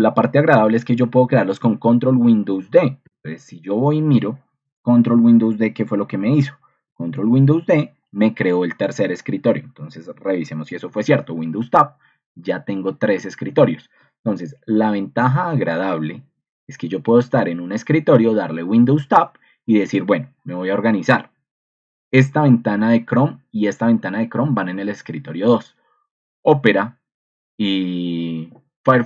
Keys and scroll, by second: 0.0 Escape, 2.3 ctrl+super+d, 3.0 ctrl+2, 10.6 super+Tab, 17.5 super+Tab.